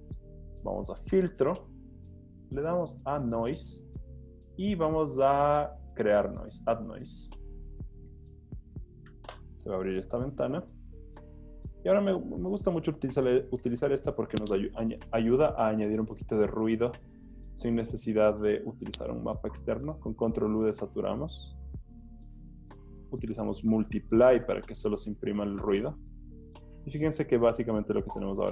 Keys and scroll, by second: 19.2 super+u, 26.0 z.